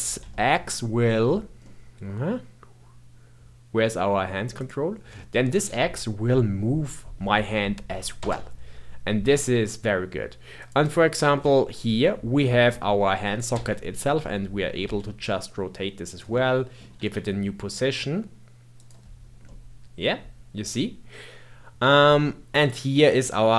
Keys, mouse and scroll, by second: 4.5 click, 5.1-5.6 middle drag, 5.6 g, 10.5 click, 11.4 g, 14.1-14.7 middle drag, 14.7 r, 16.3-16.9 middle drag, 16.9 r, 19.1-19.4 scroll down 1, 19.4-22.4 middle drag, 22.5 click.